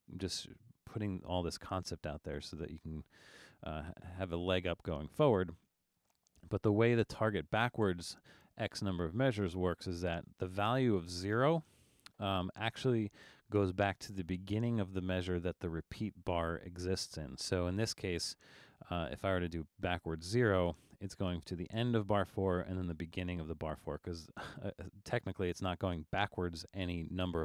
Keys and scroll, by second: 10.6 0.